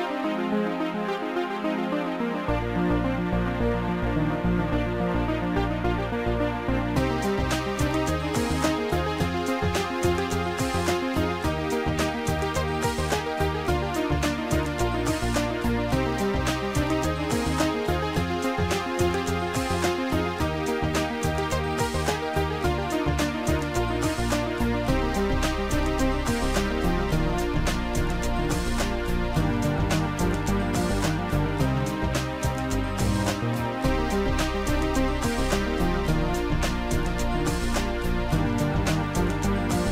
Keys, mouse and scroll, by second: 0.6 click, 2.1 click, 3.8 Return, 7.8 click, 8.9 ctrl+click, 11.3 click, 12.9 click, 18.3 click, 18.9 click, 20.1 click, 22.7 click, 25.3 click, 26.4 click, 29.9 click, 36.2 click, 37.3 click.